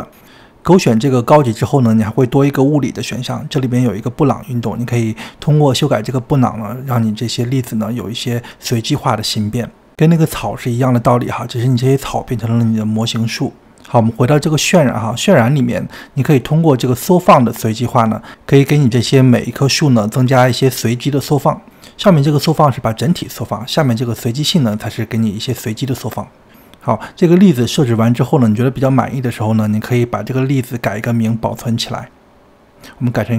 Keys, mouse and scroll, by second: 0.1 scroll down 2, 0.3-1.5 middle drag, 7.2-11.9 drag, 16.7-20.3 drag, 21.9-25.8 drag, 29.5 click.